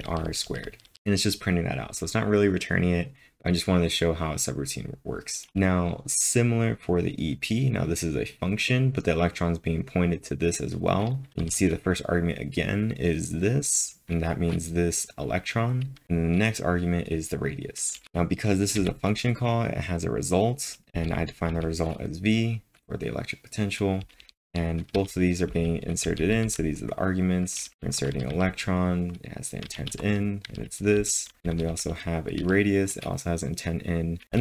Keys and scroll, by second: 0.0-1.4 typing, 5.3-6.0 typing, 11.3 ctrl+l, 16.0 typing, 18.6-19.3 typing, 24.3-26.4 typing, 31.1-32.9 typing.